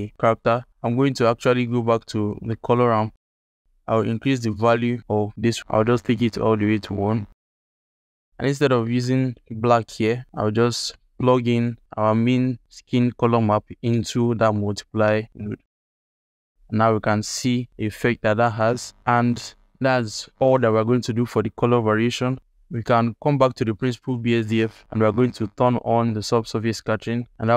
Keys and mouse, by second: 0.8 click, 1.1-1.7 alt+shift+middle drag, 3.1 click, 8.1 alt+shift+middle click, 12.2-15.6 drag, 22.4 shift+click, 22.8 alt+shift+click.